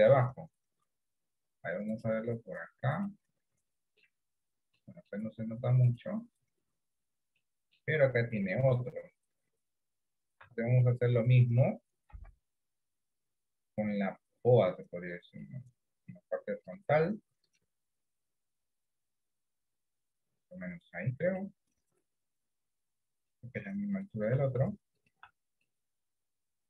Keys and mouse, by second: 2.0-3.2 drag, 3.9 middle click, 5.0 middle click, 6.0 click, 7.4 middle click, 10.5 Tab, 10.9 middle click, 12.2 KP_1, 15.4 click, 21.6-23.4 middle drag, 25.7-26.6 middle drag.